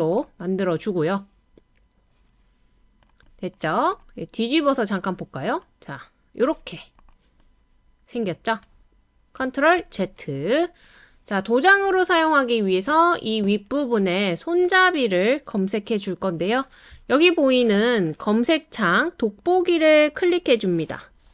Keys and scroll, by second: 9.8 super+z.